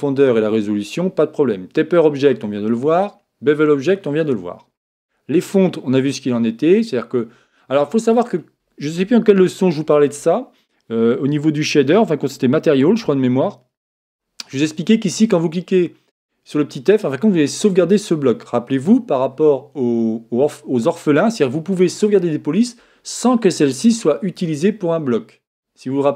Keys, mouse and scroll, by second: 4.4-26.1 middle drag.